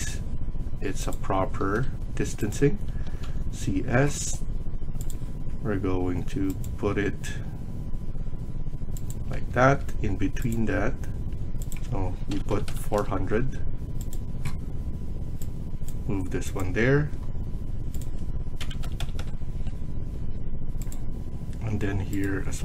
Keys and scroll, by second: 1.5 Escape, 2.7 Escape, 2.8-3.6 typing, 9.2 Escape, 9.5 Escape, 12.1-13.8 typing, 12.8 Return, 13.1 Escape, 18.5 typing, 19.1 Return, 20.1 Escape, 22.5-22.6 typing.